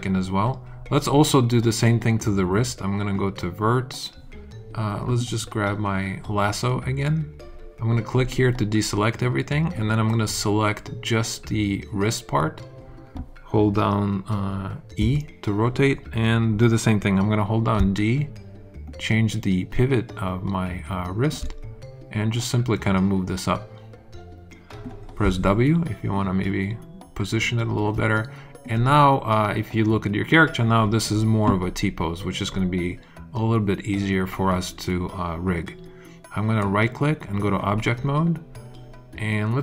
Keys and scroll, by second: 14.9 e, 17.7 d, 25.2 w.